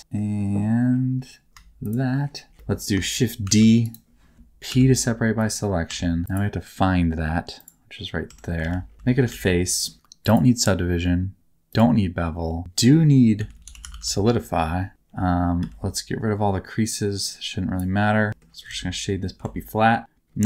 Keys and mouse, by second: 1.8 shift+click, 2.5 shift+middle click, 3.4 shift+d, 4.6 p, 5.8 Tab, 6.2 click, 8.2 Tab, 8.6 alt+z, 8.9 a, 8.9 f, 9.2 alt+z, 10.2 click, 12.6-14.9 drag, 15.5 a, 17.2 middle click, 18.3 shift+middle click, 18.7 alt+z, 19.4 alt+z.